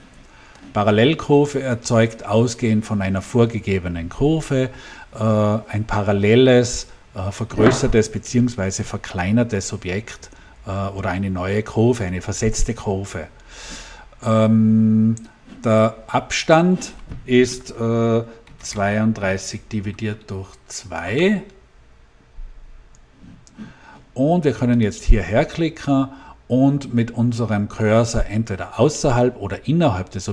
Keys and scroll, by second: 18.4-20.2 typing, 20.9 Return.